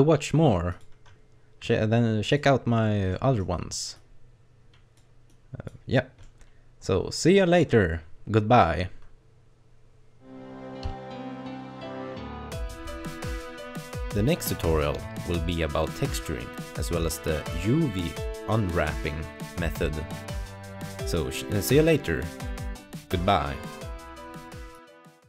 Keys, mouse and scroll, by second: 2.4 click, 3.1 middle click, 4.0 click, 5.3 click, 6.3 middle click.